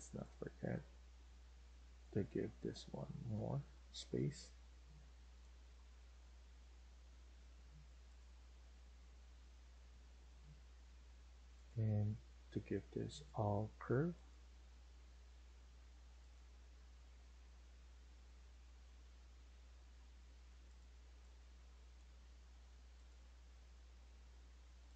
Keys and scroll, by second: 19.6 Escape, 19.9 Escape, 20.1 Escape.